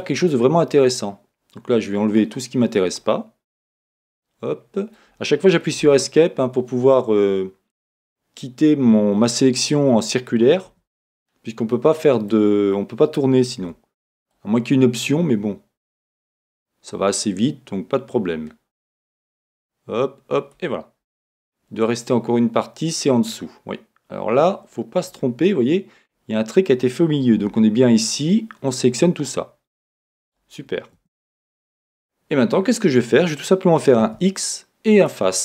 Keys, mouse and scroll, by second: 3.7 Escape, 4.1 middle click, 4.1 middle click, 4.7-5.8 middle drag, 5.8 c, 9.8-13.6 middle drag, 10.8 Escape, 13.6 c, 21.2 Escape, 22.1 middle click, 26.0-35.4 middle drag, 27.4 c, 31.0 Escape, 34.0 x.